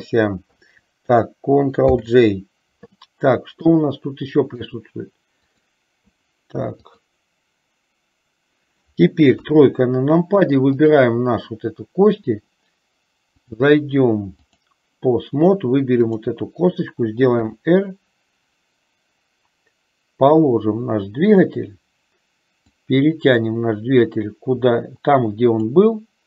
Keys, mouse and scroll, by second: 2.1 ctrl+j, 3.8-5.0 middle drag, 5.6 click, 9.6 KP_3, 10.9 click, 13.6-14.8 drag, 16.1 click, 17.6 r, 22.7-26.0 drag.